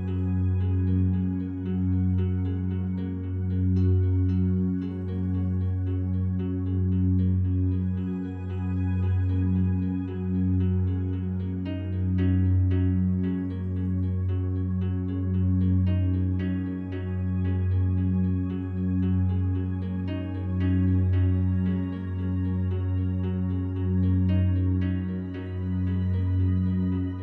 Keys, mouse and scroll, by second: 1.3 click, 3.7 alt+e, 4.0 click, 8.0 click, 8.8 a, 9.2 a, 9.4 a.